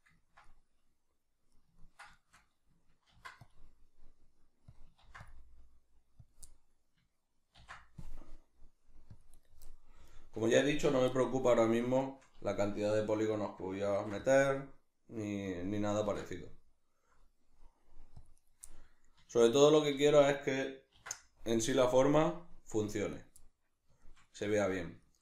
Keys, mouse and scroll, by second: 3.1 ctrl+r, 4.8 click, 5.0 ctrl+r, 6.3 click, 6.5-9.4 middle drag, 7.5 ctrl+r, 9.4 right click, 9.7-15.5 middle drag, 13.9 ctrl+r, 15.5 click, 16.0 ctrl+r, 18.5 right click, 18.7-23.2 middle drag, 20.9 ctrl+r, 23.2 right click, 23.4-25.2 middle drag.